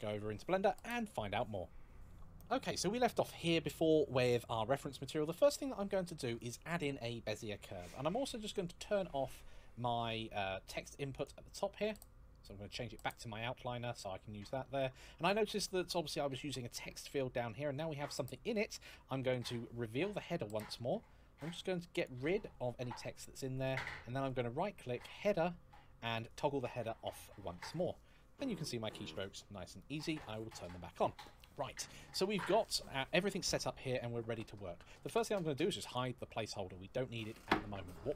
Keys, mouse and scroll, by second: 35.6 click.